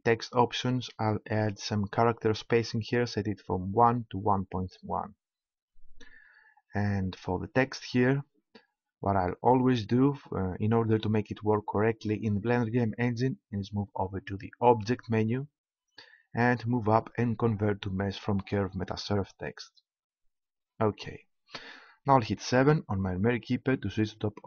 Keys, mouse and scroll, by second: 3.8-5.6 drag, 14.6-16.4 drag, 22.4 KP_7.